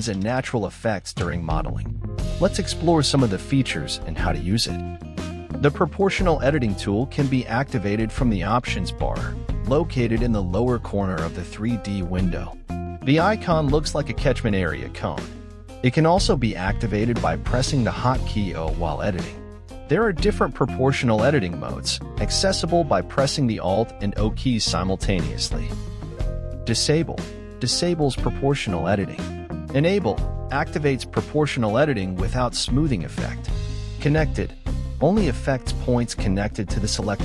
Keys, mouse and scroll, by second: 0.2 middle click, 0.8 g, 2.0 g, 14.5 click, 15.1-16.6 drag, 16.6 g, 19.3-21.8 drag, 22.3 g, 26.2-27.9 drag, 27.9 g, 35.2-36.6 drag, 36.6 g.